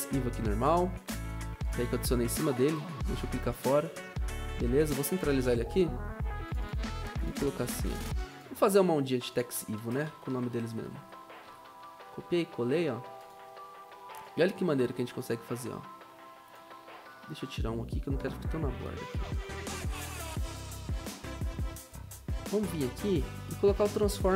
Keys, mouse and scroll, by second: 1.8 ctrl+z, 5.3 ctrl+alt+Home, 8.7 ctrl+a, 10.0 ctrl+a, 10.3 ctrl+c, 10.5 ctrl+v, 10.6 ctrl+v, 10.8 ctrl+v, 19.8 BackSpace.